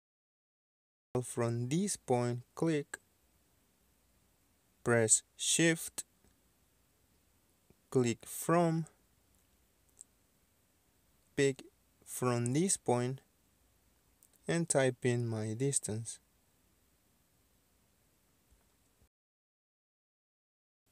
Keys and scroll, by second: 0.4 space, 14.5 KP_7, 14.6 KP_0, 16.1 KP_5, 17.1 Return, 19.5-20.3 typing.